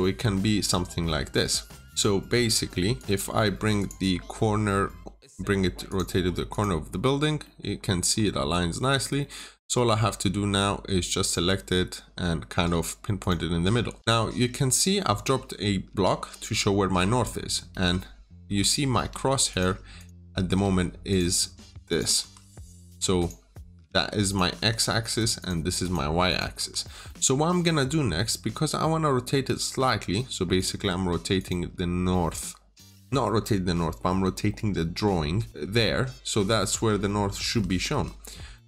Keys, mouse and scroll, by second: 3.0 Return, 3.6 click, 4.0 scroll up 1, 5.7 click, 7.1 scroll down 1, 7.3 middle click, 7.5 scroll up 1, 8.4-9.1 scroll down 1, 9.1 middle click, 9.3 scroll up 1, 9.6 typing, 9.9 Return, 11.1 click, 13.9 middle click, 14.1-17.1 scroll up 1, 17.1 middle click, 17.6 typing, 18.3 Escape, 18.8 typing, 19.4 click, 19.8 double click, 20.0 Escape, 20.4 typing, 21.0 click, 22.1 click, 23.1 click, 23.5 double click, 24.2 click, 24.4 Escape, 25.0 click, 25.3 double click, 26.6 Escape, 26.8 scroll down 1, 26.9 middle click, 30.4 click, 37.3 Escape, 37.8 Escape, 38.4 middle click.